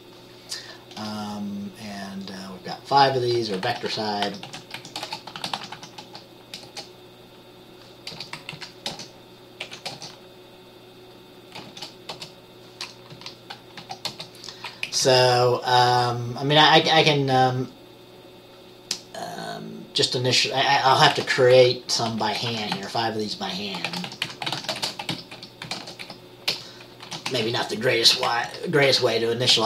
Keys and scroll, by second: 3.5 Caps_Lock, 3.9-6.8 typing, 8.7 Right, 9.1-11.9 typing, 12.3 Return, 13.0-15.5 typing, 21.3-22.9 typing, 24.2-27.6 typing, 28.6 Right, 29.5-29.6 typing.